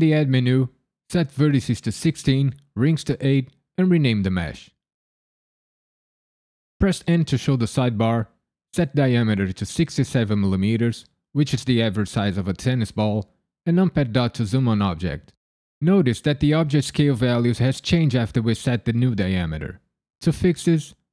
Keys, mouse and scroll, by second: 0.9 click, 4.3 click, 4.4 click, 5.1 n, 5.8 l, 7.0 n, 8.1 click, 13.9 KP_Decimal.